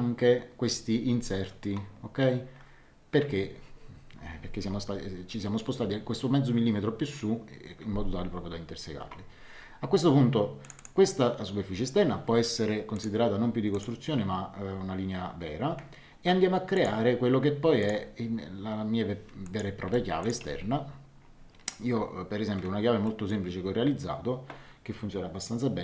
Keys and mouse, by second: 10.6 click, 12.9 click, 16.7 click, 17.8 click, 19.4 click, 19.8 Escape, 20.2 click, 20.4 x, 23.0 middle click.